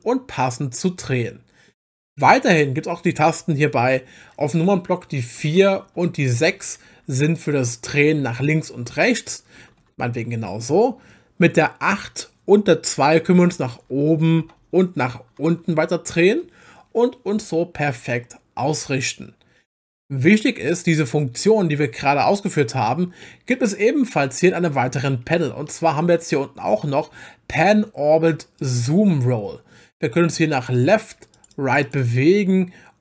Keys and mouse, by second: 5.4-9.8 typing, 13.0-15.5 typing, 23.2-25.0 middle drag, 28.6 click, 30.3 click, 30.6 click, 30.8 click, 31.3 click, 31.5 click, 31.8 click, 32.0 click.